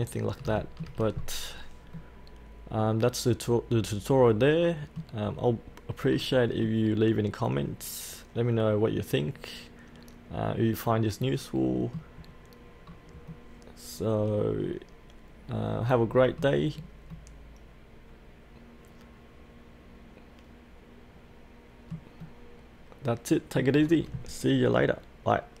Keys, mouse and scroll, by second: 0.1 scroll up 1, 0.6 shift+middle click, 1.1-1.9 scroll down 1, 2.4-5.3 middle drag, 5.3-6.1 scroll up 1, 6.1-6.6 scroll down 1, 6.6-12.2 middle drag, 12.2-12.8 scroll up 1, 12.8-13.3 scroll down 1, 13.3-16.6 middle drag, 16.7-17.4 scroll up 1, 17.4-23.7 middle drag, 23.9-25.6 scroll down 1.